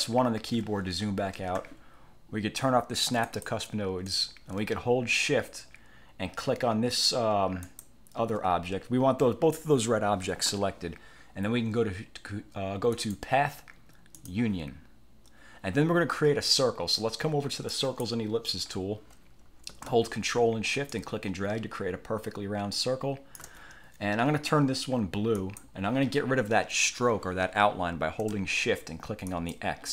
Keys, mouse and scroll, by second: 0.7 1, 3.4 click, 7.8 shift+click, 13.1 click, 14.3 click, 17.8 click, 21.0-23.7 ctrl+shift+drag, 25.5 click, 29.4 shift+click.